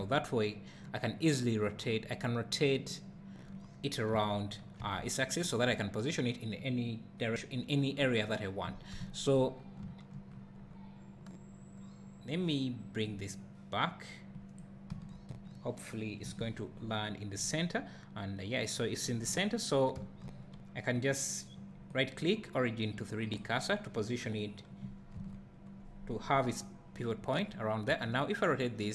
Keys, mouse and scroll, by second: 4.1 r, 7.3 right click, 8.6 scroll down 1, 9.0 `, 9.6 scroll down 1, 9.9 `, 10.3 scroll down 1, 13.1-23.4 drag, 15.0 KP_1, 16.3 KP_Decimal, 16.8 scroll down 1, 17.4 scroll up 1, 19.3 `, 23.4-28.9 right drag, 25.2 KP_1, 27.9 r.